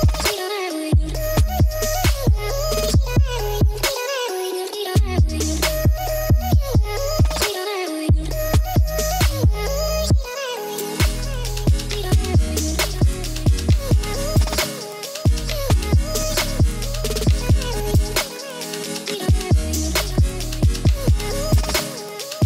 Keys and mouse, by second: 0.1 z, 0.4 click, 0.6 drag, 1.2-1.7 drag, 2.0 ctrl+s, 2.5-4.1 drag, 4.7-5.1 drag, 6.0 drag, 6.3 shift+a, 11.4-13.4 drag, 14.0 click, 16.5-18.4 drag, 19.9-21.2 drag.